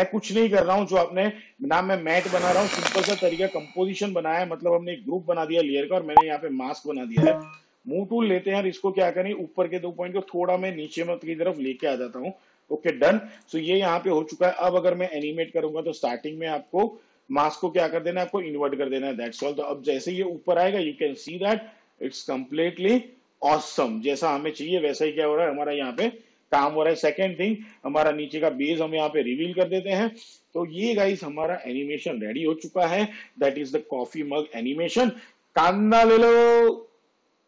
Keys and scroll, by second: 7.6 v, 10.3 shift+Down, 11.9 Up, 15.3 shift+/, 19.5 space, 26.1 space, 35.1 space.